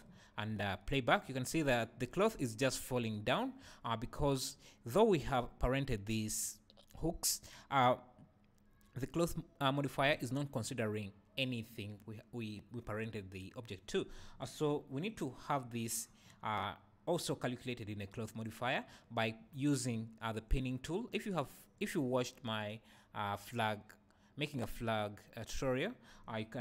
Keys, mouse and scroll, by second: 0.5 space, 0.7 space, 3.4 Escape.